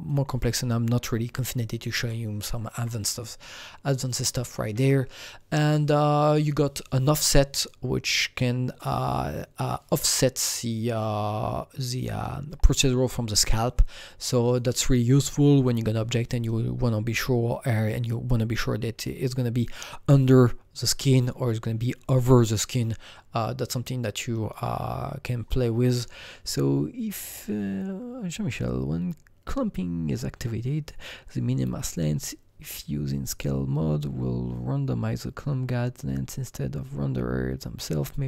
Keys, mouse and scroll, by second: 0.0 click, 1.3-5.0 alt+right drag, 2.0-5.0 alt+middle drag, 6.3 click, 6.3-11.8 alt+middle drag, 6.3-7.6 alt+right drag, 7.6-11.8 drag, 14.4-17.0 drag.